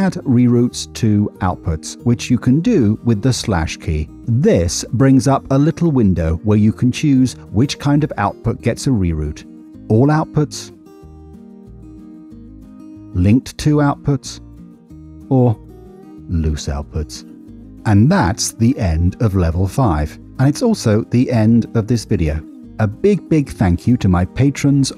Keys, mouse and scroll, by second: 0.2 middle click, 0.8 middle click, 2.8 /, 3.4 click, 4.0 /, 12.5 click, 13.2 /, 16.0 click, 16.3 /, 20.5 middle click, 21.4 middle click, 22.4 click, 22.8 KP_Decimal, 23.4 middle click, 24.0 middle click.